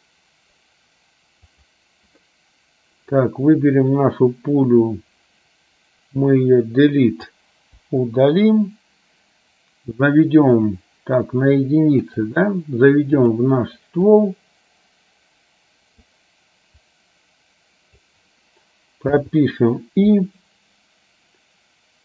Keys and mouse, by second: 4.9-7.4 drag, 7.9 Delete, 10.7 click, 12.2 click, 14.3-16.2 drag, 16.9 click, 17.4 click.